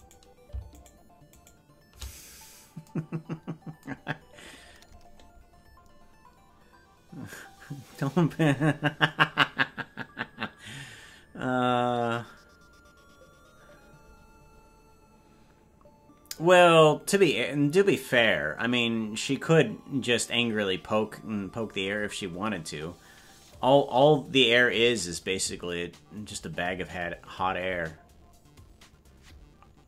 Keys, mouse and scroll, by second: 0.2 right click, 1.0-2.7 shift+right drag.